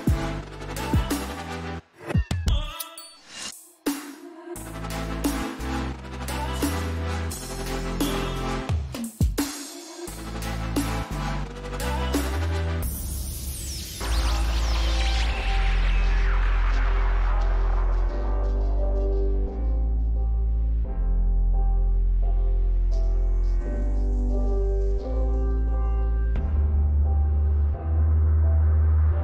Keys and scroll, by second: 3.1-3.9 typing, 5.7 0, 6.5 1, 6.9 Return, 7.5-9.4 typing, 13.3 0, 14.6 3, 15.1 BackSpace, 15.3 4, 15.6 Return, 22.1 5, 22.2 Return, 23.1 6, 23.5 Return, 24.6 5, 24.7 Return, 25.2 6, 25.4 Return, 27.4 Up, 27.7 Up.